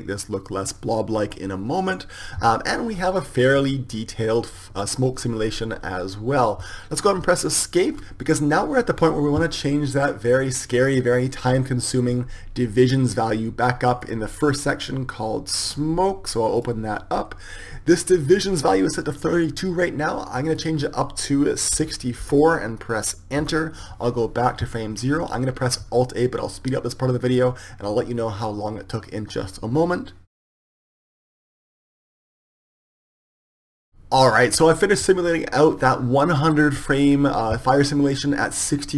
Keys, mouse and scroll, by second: 4.8-6.1 middle drag, 7.9 Escape, 8.0-24.9 drag.